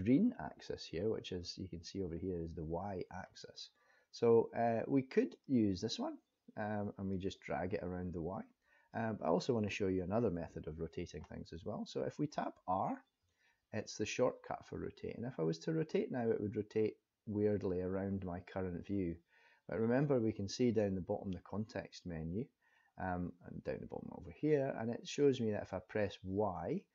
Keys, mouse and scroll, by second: 5.4 click, 7.1 click, 10.2 ctrl+z, 13.2 r.